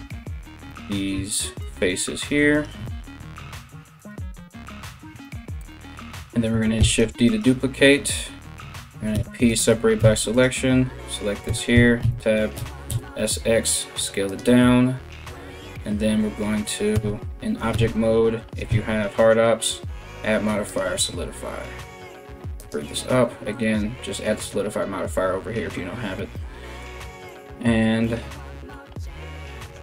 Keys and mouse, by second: 0.0 right click, 0.2-1.2 middle drag, 1.2 ctrl+right click, 1.3 ctrl+middle click, 2.1 ctrl+right click, 2.2-29.8 ctrl+middle drag, 3.6 ctrl+right click, 4.4 ctrl+right click, 6.4 shift+d, 8.7 p, 9.6 Tab, 9.9 right click, 11.1 Tab, 11.3 s, 11.6 a, 12.1 s, 16.5 Tab, 17.3 w, 18.3 q, 26.9 right click.